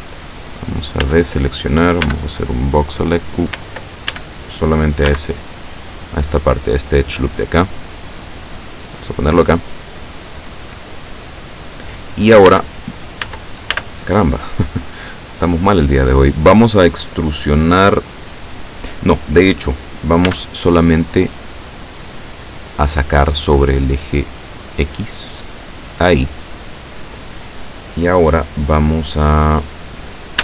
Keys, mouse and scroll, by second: 1.1 a, 2.1 b, 2.4-3.5 drag, 4.2 ctrl+a, 5.2 b, 5.6-6.6 drag, 8.2-11.1 drag, 12.6 Tab, 13.3 Tab, 13.8 a, 20.3 b, 21.2 click, 22.7-25.8 drag.